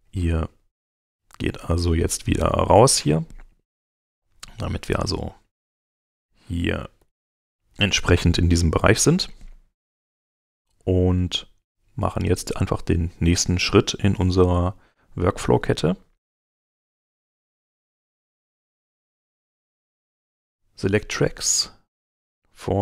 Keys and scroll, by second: 7.0 shift+z.